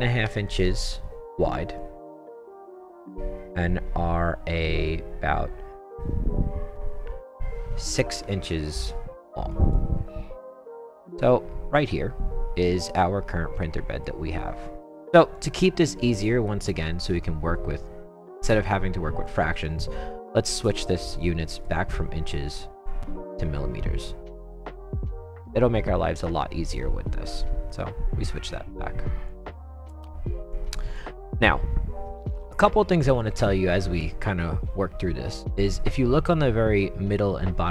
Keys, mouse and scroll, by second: 0.2 5, 1.8 click, 8.2 6, 9.5 click, 11.1-14.0 right drag, 14.4-14.8 right drag, 15.3-15.9 drag, 16.1 right click, 16.5-17.1 right drag, 19.2 click, 21.5 click, 22.7 click, 29.3 click, 30.5-30.9 drag, 31.3 right click.